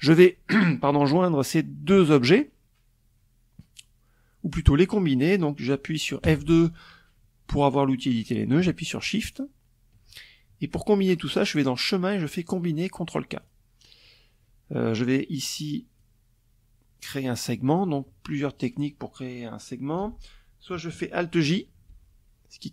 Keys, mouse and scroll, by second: 4.8 F2, 7.8 shift+click, 9.8 click, 11.9 click, 13.4-14.7 drag, 20.4 alt+j, 21.9 ctrl+z.